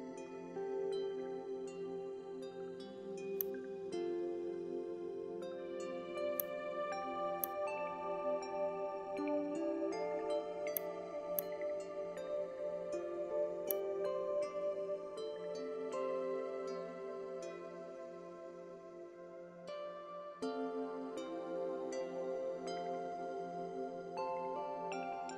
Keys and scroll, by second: 4.2 space, 4.9 alt+space, 5.4 alt+space.